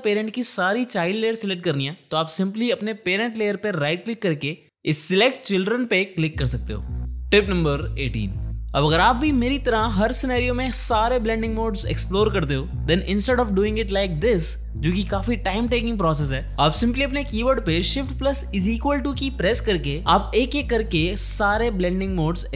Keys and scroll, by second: 18.6 shift+=.